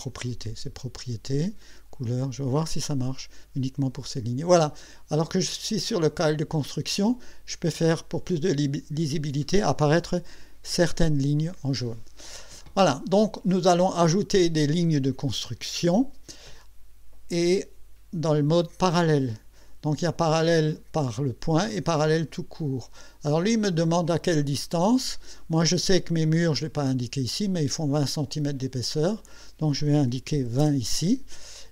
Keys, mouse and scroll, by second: 0.0 click, 1.6 click, 2.7 click, 3.8 click, 6.1 click, 6.6 click, 22.6 click, 26.7 click, 27.5 click, 29.2 click, 30.4 KP_2, 30.6 KP_0.